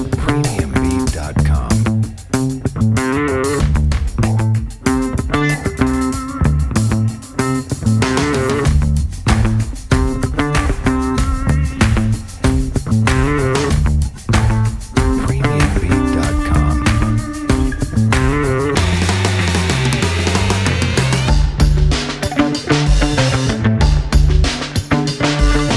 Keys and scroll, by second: 3.4 0, 3.5 Return, 4.5 F4, 10.3-11.1 typing, 11.4 F4, 12.2-13.1 typing, 15.2 space, 15.4 F3, 16.2 F3, 19.2-21.6 typing, 25.1 space.